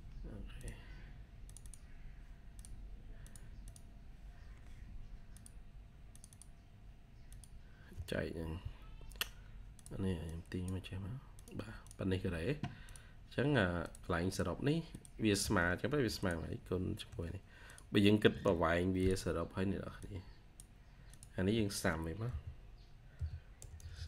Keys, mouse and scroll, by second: 1.5 double click, 3.5 double click, 11.7 double click, 14.1 double click, 15.7 typing, 18.2 Return, 22.1-24.0 typing.